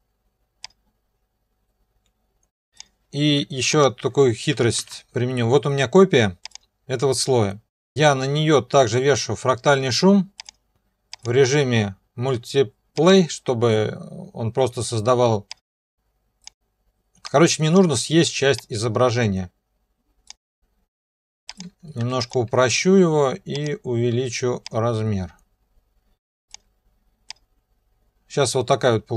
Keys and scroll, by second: 4.8 ctrl+b, 22.0 3.